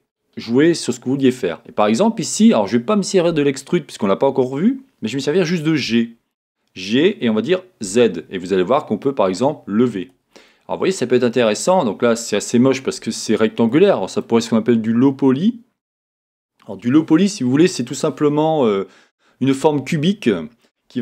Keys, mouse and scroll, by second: 1.5-5.7 scroll up 2, 10.4 click, 12.8-13.2 scroll up 2, 13.2-13.6 scroll, 13.7-21.0 middle drag.